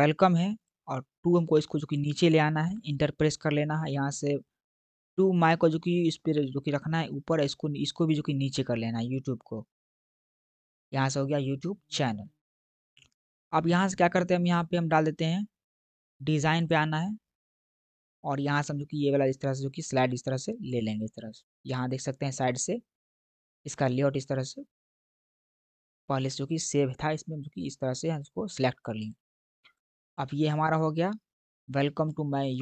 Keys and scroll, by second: 2.5 Return, 9.7 Return.